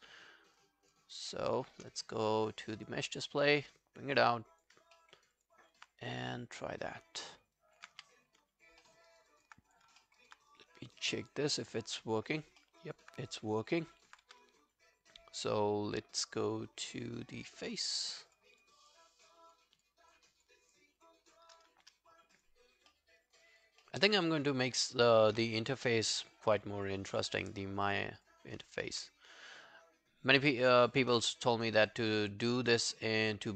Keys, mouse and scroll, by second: 0.5 shift+click, 2.8 shift+click, 2.8 double click, 3.2 double click, 5.0 alt+middle click, 5.2 alt+right click, 5.4 alt+click, 7.0 scroll down 3, 7.3 alt+middle click, 7.6 alt+click, 7.9 q, 8.8 alt+middle click, 9.1 alt+right click, 9.3 alt+click, 10.0 alt+middle click, 10.2 alt+right click, 10.5 right click, 11.5 scroll down 1, 11.7 alt+click, 12.8 alt+middle click, 12.9 alt+right click, 13.5 alt+right click, 13.5 scroll down 2, 13.8 alt+middle click, 13.9 alt+right click, 14.3 q, 14.4 right click, 18.3 shift+click, 18.6-20.1 shift+click, 21.0 shift+click, 21.6 shift+click, 21.6 scroll down 1, 21.9 alt+click, 22.6-23.2 alt+scroll down 3, 22.9 alt+middle click, 23.2 alt+right click, 23.5 alt+click, 23.8 alt+middle click, 24.1 alt+right click, 24.3 alt+click, 25.6 shift+click, 26.0-28.5 shift+click, 29.2 shift+click, 30.5 alt+middle click, 30.7 alt+right click, 30.9 alt+click, 31.6 shift+click, 31.9-33.5 shift+click.